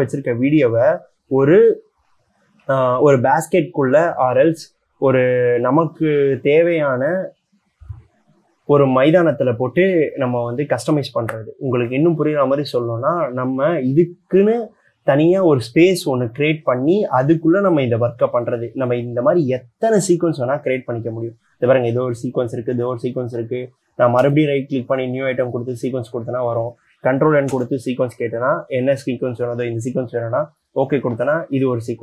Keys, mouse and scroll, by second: 24.5 right click, 27.8 ctrl+n.